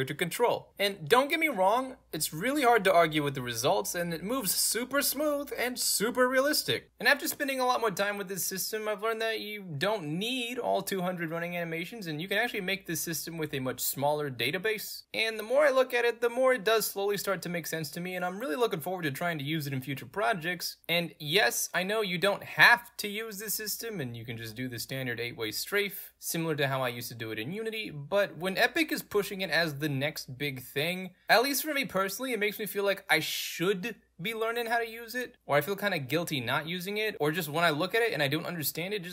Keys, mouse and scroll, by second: 0.2 w, 0.7 space, 1.6 a, 2.9 a, 3.6 space, 4.2 w, 5.3 w, 6.6 s, 6.8 space, 8.3-11.5 typing, 15.5 d, 16.1 a, 17.0 a, 18.6 space, 20.9 a, 21.4 space, 22.7 a, 23.3 space, 23.8-28.3 middle drag, 23.8-28.3 scroll up 2, 28.3 s, 29.4 a, 31.0-37.7 typing, 39.0 w.